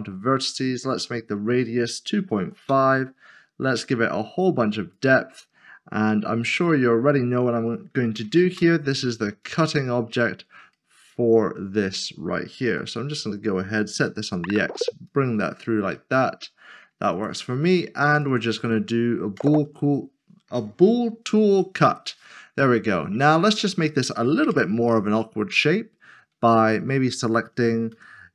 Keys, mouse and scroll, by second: 0.4 Return, 1.9-2.6 typing, 6.5 click, 8.1 typing, 8.5 Return, 9.4 click, 9.9 double click, 10.7 middle click, 14.1 typing, 15.5 click, 15.9 double click, 16.1 middle click, 18.2 shift+click, 19.3 ctrl+shift+[, 22.4 scroll up 1, 23.1 middle click, 24.5 Tab, 25.0 scroll down 1, 26.5 middle click.